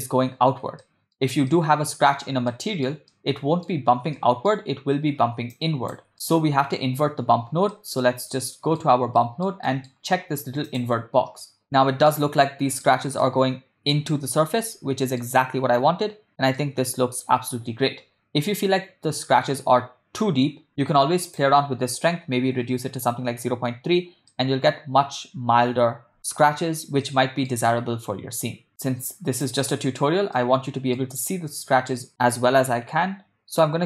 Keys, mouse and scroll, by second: 0.9 ctrl+middle drag, 1.6-2.2 shift+middle drag, 2.9 ctrl+middle click, 3.3-3.9 middle drag, 4.3 shift+middle click, 5.5 click, 6.5 middle click, 7.9 ctrl+middle click, 8.5 middle click, 9.2 ctrl+middle click, 9.7 middle click, 10.9 click, 12.2-12.9 shift+middle drag, 13.3-14.1 ctrl+middle drag, 14.8-15.4 shift+middle drag, 16.6 ctrl+middle click, 21.3-23.1 drag, 24.6 middle click, 27.2 ctrl+middle click, 28.7 click, 30.5-31.3 middle drag, 32.1-33.8 drag.